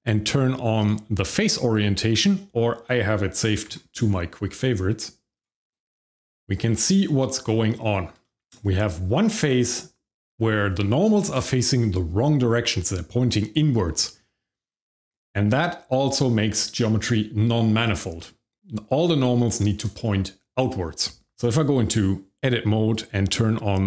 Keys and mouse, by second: 0.8-2.3 drag, 3.6 q, 6.2-6.9 shift+middle drag, 8.2 shift+middle click, 21.3 Tab, 22.9-23.8 drag.